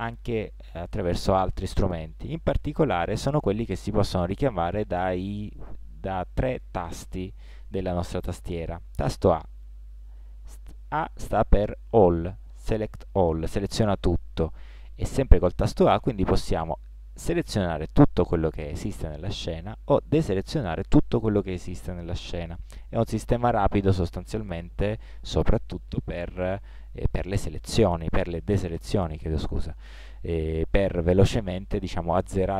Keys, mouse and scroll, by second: 9.7 a, 15.1 a, 19.7 a, 27.2 a, 29.5 a.